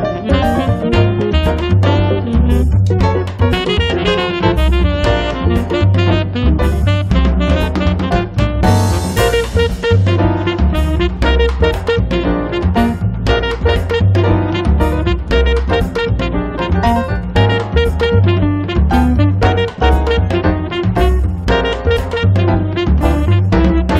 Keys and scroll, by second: 12.6-14.0 typing.